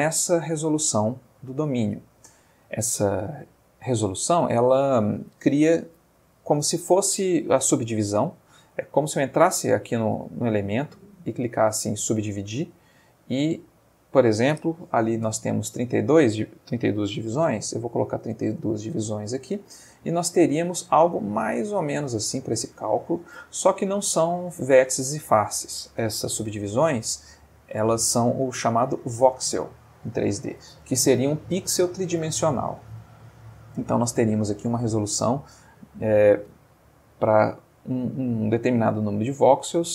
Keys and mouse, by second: 8.6 Tab, 10.5 right click, 11.3 click, 12.8 click, 13.9 click, 17.7 3, 17.8 2, 18.1 Return, 19.7-23.9 middle drag, 24.7-25.7 middle drag, 26.5 ctrl+z, 27.7 Tab, 37.5-38.2 middle drag, 39.5 click.